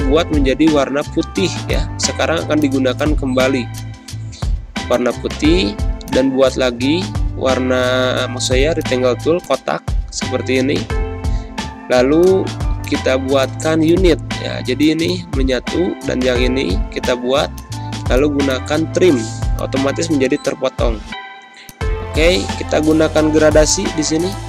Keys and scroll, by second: 1.5 space, 18.6 space.